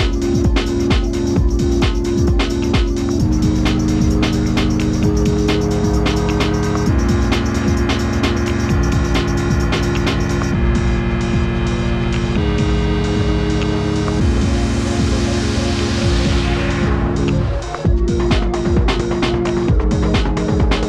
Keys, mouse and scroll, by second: 7.1 click, 7.5 Up, 8.1 shift+Left, 8.8 Right, 8.9 Right, 9.2 Down, 9.3 Down, 9.7 Up, 10.0 Up, 12.5 click.